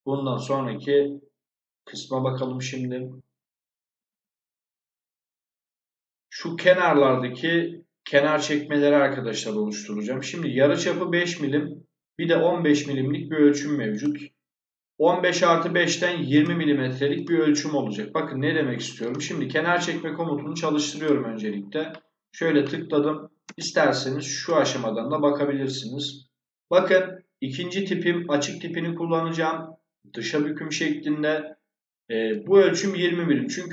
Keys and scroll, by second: 23.3 space.